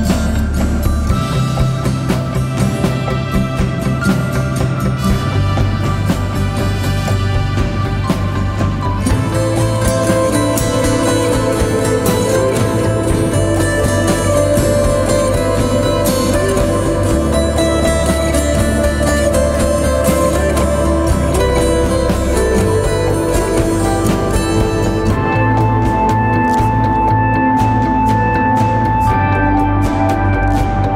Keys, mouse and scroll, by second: 0.0-1.4 typing, 3.1-3.8 typing, 20.4 alt+BackSpace, 30.3-30.9 typing.